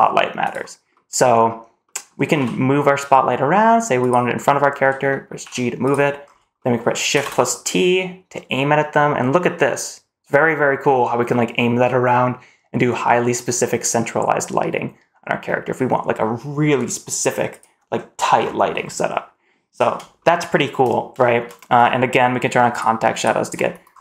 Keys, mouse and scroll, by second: 0.8 middle click, 1.2-1.5 scroll down 2, 1.7 middle click, 2.2 g, 4.2-4.6 middle drag, 4.9 middle drag, 5.2 g, 6.1 scroll up 2, 6.4 middle drag, 7.0 shift+t, 18.2-18.7 scroll up 2, 18.7-19.3 middle drag, 19.6 scroll down 1, 20.0 shift+middle click, 21.1 shift+middle click, 22.5 click, 23.0 click, 23.7 scroll up 2.